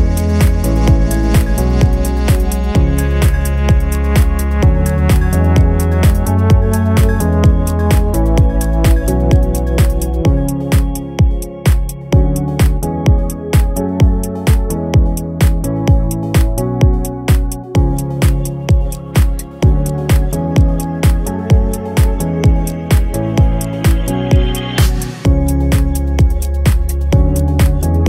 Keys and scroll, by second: 4.7 shift+u, 4.8 s, 5.2 s, 23.6 g, 24.0 g, 24.3 g, 24.8 x, 26.4-28.0 typing.